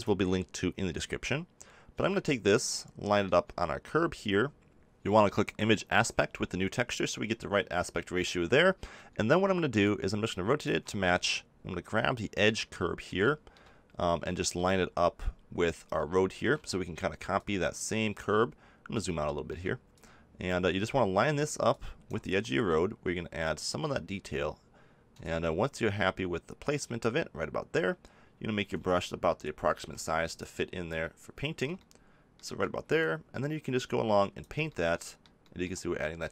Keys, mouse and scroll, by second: 1.2 click, 1.8 middle click, 5.9-7.7 drag, 7.7-9.8 middle drag, 9.8-11.7 drag, 11.7-17.3 middle drag, 17.3-19.0 drag, 19.9-24.0 drag, 25.2-29.8 drag, 29.8 f.